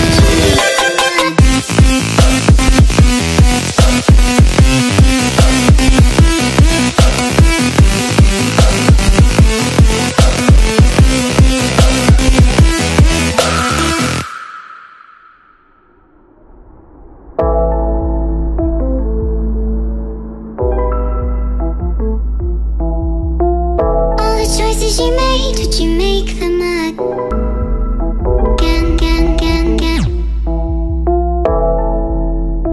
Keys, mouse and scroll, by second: 4.3 click, 6.0 click, 6.4 ctrl+space, 6.7 click, 7.4 click, 8.3 click, 9.7 click, 9.9 click, 14.5 click, 16.0 click, 18.3 click, 18.9 click, 20.0 click, 21.9 click, 22.8 click, 24.4 click, 24.9 click, 25.4 click, 26.3 click, 27.3 click, 28.5 click, 29.3 click, 32.3 click.